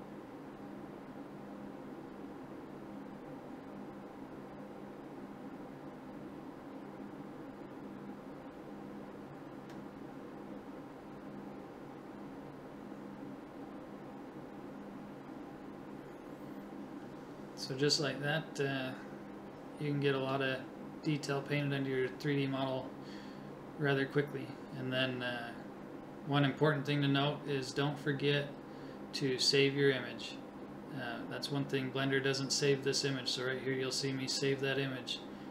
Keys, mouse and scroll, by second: 1.6 KP_7, 2.2-3.2 drag, 3.5 click, 4.3-6.3 right drag, 7.1-8.6 right drag, 9.2-10.4 drag, 10.9 right click, 11.7 click, 19.6 click, 22.3 click, 23.0 click, 23.5 click, 24.4 click, 25.7-27.8 middle drag, 27.8 alt+h, 29.7 middle click, 30.6 click, 31.6-33.1 middle drag, 33.1-34.1 drag.